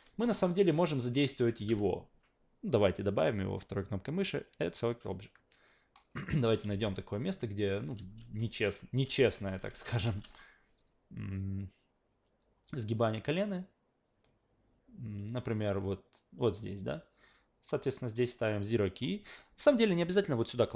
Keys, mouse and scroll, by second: 0.8 alt+click, 3.0 right click, 4.7 click, 5.7-6.3 drag, 6.5 alt+middle drag, 6.7 alt+v, 8.0 alt+v, 9.0 alt+v, 9.4 alt+v, 9.7 alt+v, 10.0 alt+v, 10.8-18.1 drag.